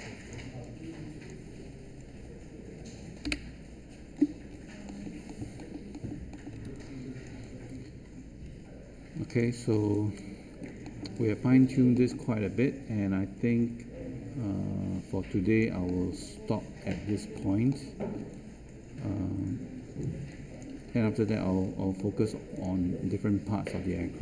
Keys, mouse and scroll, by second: 3.2 Delete, 6.6 space.